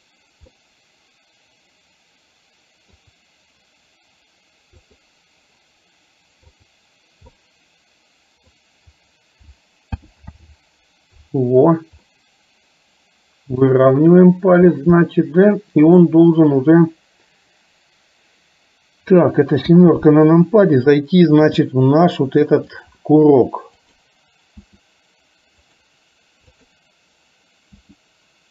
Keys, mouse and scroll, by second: 0.6-2.9 middle drag, 4.8 click, 6.7 click, 7.3-8.6 middle drag, 10.1 alt+g, 10.8 alt+r, 12.1-13.8 middle drag, 15.1-16.1 middle drag, 19.7 KP_7, 21.6 r, 23.8 click, 24.8 r, 26.6 click, 27.8 r.